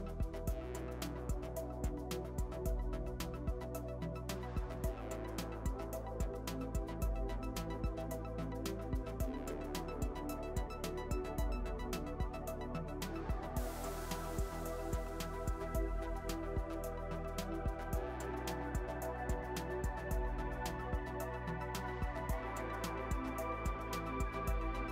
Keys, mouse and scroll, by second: 0.5 ctrl+r, 1.5 KP_3, 2.0 click, 2.6 KP_3, 2.8 KP_1, 3.6 g, 5.5 s, 6.5 click, 7.7 s, 9.0 g, 10.8 click, 12.5 click, 13.4 middle click, 13.9 Tab, 14.0 middle click, 14.6 click, 15.3 Tab, 17.3-18.7 middle drag, 18.5 ctrl+r, 19.4 click, 19.8-21.2 middle drag, 20.6 click, 22.9 click, 23.8 KP_3, 24.0 KP_1.